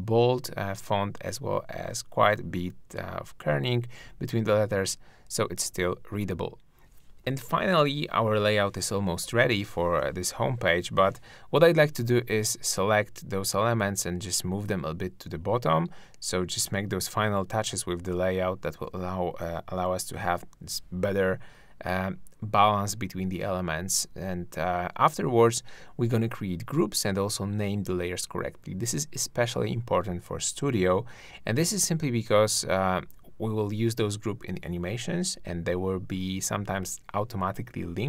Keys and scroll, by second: 1.9 super+0, 3.1 super+space, 14.6 shift+Down, 14.8 shift+Up, 24.4 shift+Up, 25.0 shift+Down, 25.6 shift+Left.